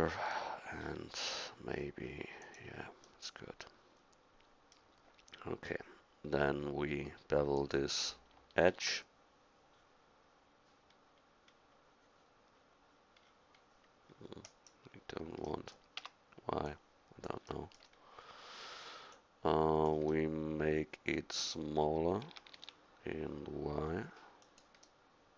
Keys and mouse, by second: 0.1 ctrl+r, 2.6 click, 3.8 middle click, 4.6 middle click, 8.7 ctrl+b, 16.0 Tab, 20.3-20.6 middle drag, 20.8 middle click, 22.3 s, 25.1 middle click.